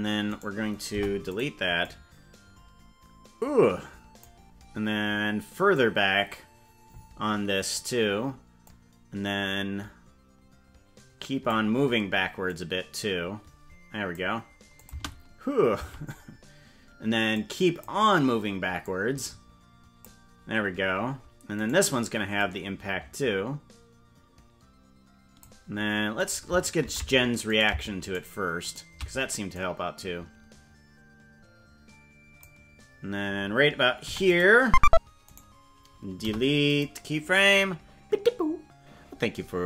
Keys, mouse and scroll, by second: 0.3 right click, 0.9 Delete, 1.8-4.2 drag, 5.7-7.8 drag, 8.6-11.5 drag, 12.4-14.2 drag, 14.8 click, 14.9 space, 15.9 space, 17.3 click, 18.8-20.0 drag, 21.6 right click, 22.4-25.4 drag, 26.3 right click, 26.9 ctrl+Tab, 27.7 right click, 28.3 shift+right click, 28.9 right click, 29.5-32.4 drag, 34.1 i, 35.3 right click, 36.3 Delete.